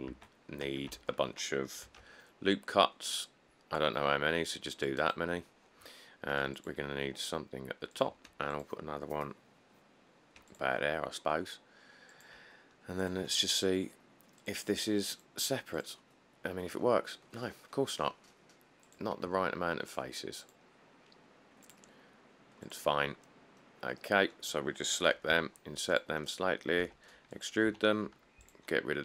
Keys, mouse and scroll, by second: 0.3 Tab, 0.4 middle click, 0.5 middle click, 0.5 middle click, 1.2 Tab, 2.1 ctrl+r, 2.5-2.9 scroll up 5, 3.7 scroll down 2, 3.8-4.9 scroll, 6.5 ctrl+r, 8.5 ctrl+r, 24.4 middle click, 25.5 typing, 26.8-27.9 typing.